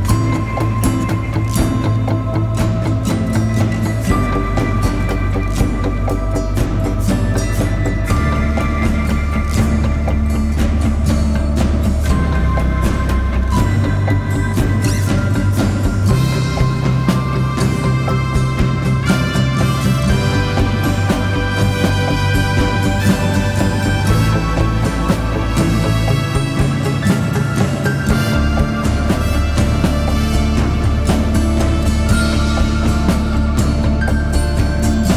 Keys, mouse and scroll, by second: 0.3 double click, 12.4 shift+click, 13.4 shift+click, 15.6 shift+click, 16.7 shift+click, 18.2 shift+click, 21.9 ctrl+Return, 23.4 ctrl+Return, 24.5 alt+BackSpace, 26.4 ctrl+d.